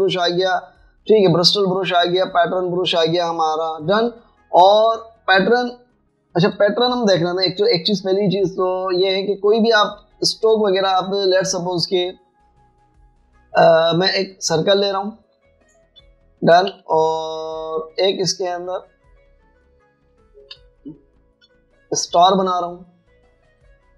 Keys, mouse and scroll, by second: 5.8 double click, 10.6 Escape, 12.8 right click, 15.8 alt+scroll up 1, 16.4 alt+click, 17.4 alt+scroll up 1, 17.5 alt+scroll down 1, 17.7 v, 19.1 right click, 21.1 space, 22.1 alt+shift+scroll up 1, 23.5 right click.